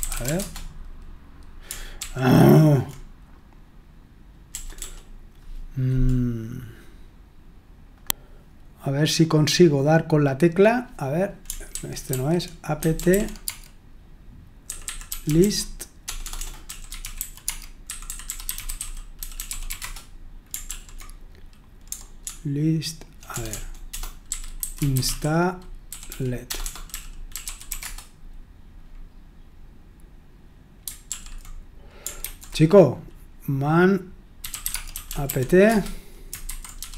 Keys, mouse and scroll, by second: 0.0-0.7 typing, 2.0 ctrl+p, 4.5 BackSpace, 4.7 BackSpace, 11.7 ctrl+w, 12.1 ctrl+w, 12.6-20.2 typing, 20.7 ctrl+p, 22.2-28.3 typing, 31.1 ctrl+p, 32.2 ctrl+c, 34.1-36.9 typing.